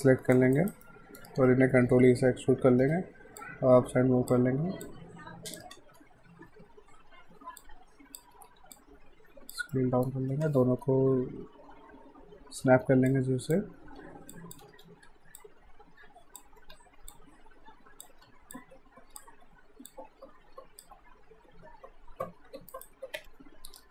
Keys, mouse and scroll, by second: 0.0 click, 0.6 alt+right click, 0.8 alt+middle click, 1.9 e, 3.4 click, 5.8 z, 7.6 click, 8.3 r, 8.8 click, 9.7 alt+middle click, 10.3 r, 12.8-15.1 typing, 13.1 click, 14.3 click, 15.4 click, 16.6 r, 17.1 click, 18.3 w, 18.5 click, 19.9 click, 22.4 q, 22.8 right click, 23.2 F5.